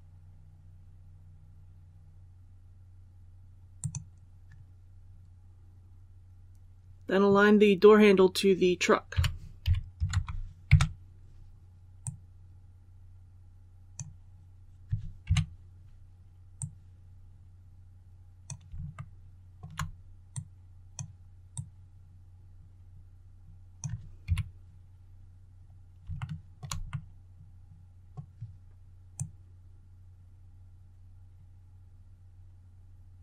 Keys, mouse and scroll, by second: 3.7 click, 9.1-9.9 typing, 12.0-14.4 drag, 16.5-18.5 drag, 18.9 shift+middle click, 20.2-21.4 drag, 24.2 KP_1, 25.5 scroll up 1, 26.1 shift+middle click, 26.8-28.5 middle drag, 29.1-33.2 drag.